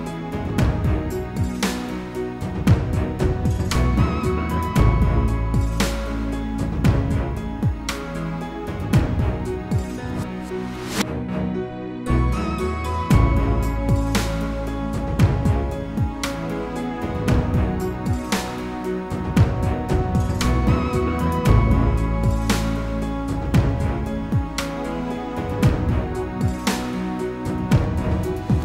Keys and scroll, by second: 12.4 ctrl+g.